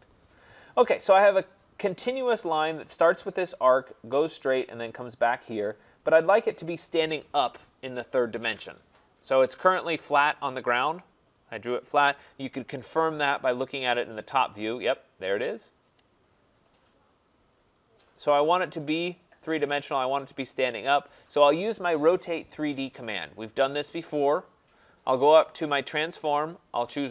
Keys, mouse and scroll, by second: 1.0 click, 11.8 right click, 13.2 click, 13.4 click, 13.9 click, 14.1 click, 14.7 scroll, 17.7 click, 17.9 click, 19.1 click, 19.3 click, 19.7 scroll, 20.5 right click, 20.8-21.8 scroll, 23.5 click, 24.9 middle click, 25.9 click.